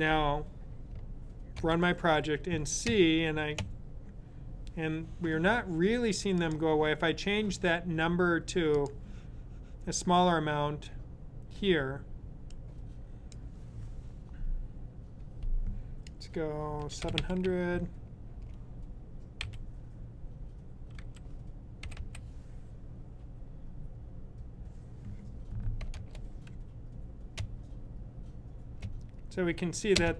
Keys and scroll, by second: 16.4-17.6 typing, 19.2 typing, 20.9-21.9 typing.